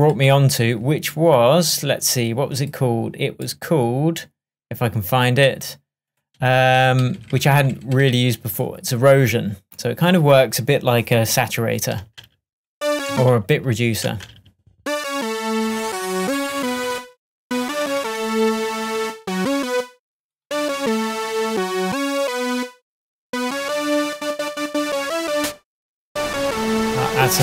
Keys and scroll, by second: 6.4 Up, 12.1 space.